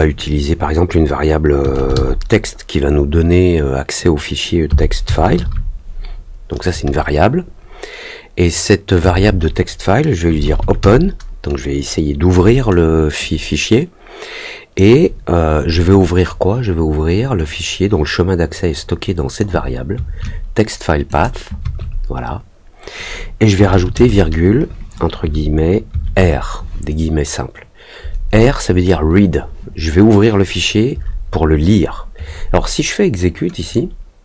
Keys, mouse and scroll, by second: 17.5-19.3 drag, 21.0 click, 33.5 click.